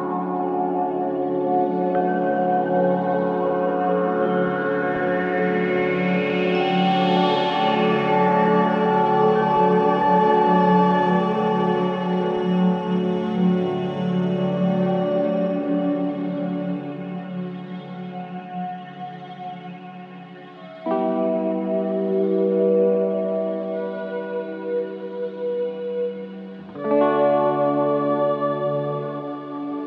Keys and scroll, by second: 1.0 t, 1.2 r, 1.3 Return, 2.5 t, 2.9 r, 3.1 Return, 5.6 2, 14.4 ctrl+z, 17.8 ctrl+z, 21.4 ctrl+d, 21.5 Escape, 22.5 Escape, 26.8 F1.